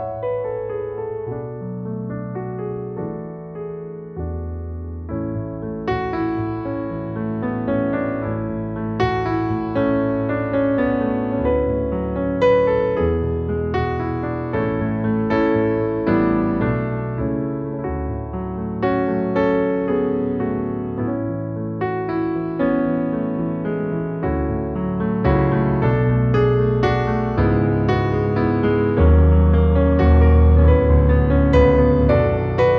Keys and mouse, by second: 0.3 click, 1.3 e, 1.5 s, 3.2 click, 4.7 e, 5.4 g, 5.6 z, 6.9 g, 7.6 z, 12.5 click, 12.7 alt+middle click, 13.2 KP_1, 14.4 click, 15.5 shift+middle click, 16.0 s, 17.9 click, 20.7 e, 22.3 g, 22.5 z, 24.2 g, 24.8 z, 28.7 click, 29.9-31.4 middle drag, 31.5 Tab, 31.7 click, 32.0 alt+middle click.